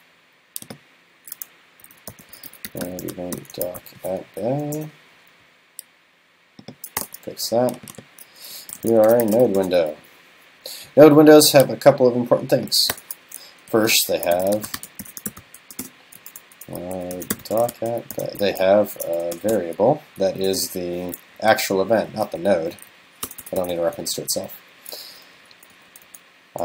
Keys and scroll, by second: 1.9 super+., 19.0 super+s, 21.7 alt+Right.